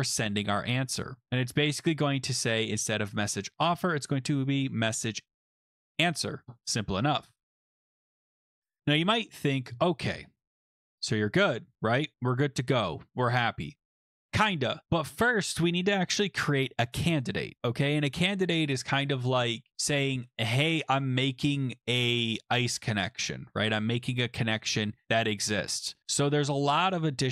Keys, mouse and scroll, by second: 2.8 click, 2.9 click, 5.1-6.1 typing, 8.0-9.0 scroll down 3, 10.1 scroll up 1, 10.4 scroll down 2, 11.7 scroll, 12.0 click, 12.1 click, 12.4 ctrl+f, 13.3 click, 14.3 click.